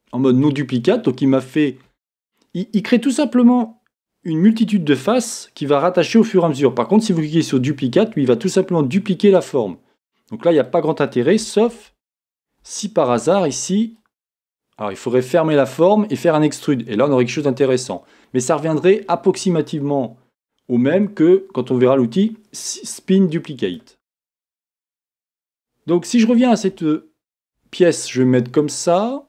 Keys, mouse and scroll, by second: 27.6 KP_7.